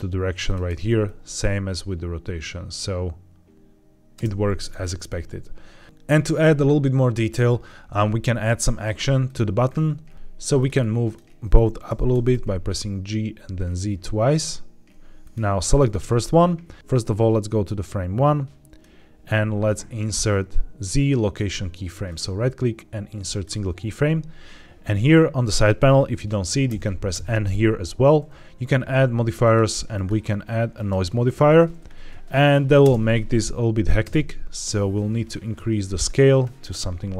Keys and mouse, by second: 2.0-3.5 drag, 4.0 space, 9.2 click, 10.1 Escape, 10.1 g, 10.1 z, 11.7 g, 12.0 z, 12.2 z, 15.2 click, 16.8 click, 22.0-23.3 right drag, 26.6 n, 27.0 n, 29.3 click, 29.9-30.8 drag, 32.7 space, 34.0 space, 35.4 click.